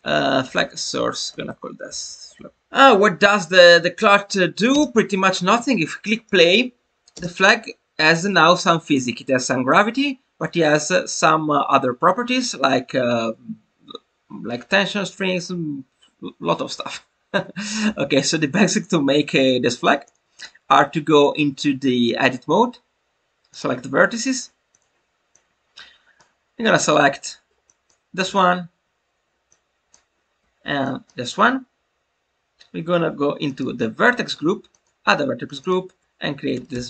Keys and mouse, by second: 2.3 BackSpace, 8.2-8.9 drag, 19.4-19.8 shift+middle drag, 20.0 click, 20.3-23.6 drag, 24.7 click, 25.3 click, 27.7-29.9 drag, 30.9 shift+click, 33.4 click, 34.6 click, 35.4 click, 35.6-36.8 drag.